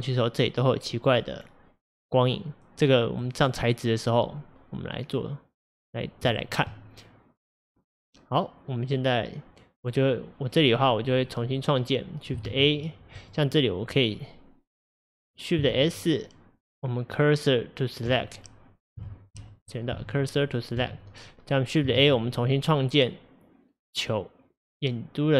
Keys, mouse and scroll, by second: 3.3-5.2 middle drag, 5.2-6.4 scroll down 1, 6.4-7.0 shift+middle drag, 7.0-8.0 scroll down 1, 8.0-9.9 scroll down 1, 9.9 click, 10.6 click, 11.0 scroll down 3, 11.3-12.5 middle drag, 12.5 shift+a, 13.2 click, 15.8 shift+s, 19.1 shift+s, 19.5 click, 20.0 shift+s, 22.0 shift+a.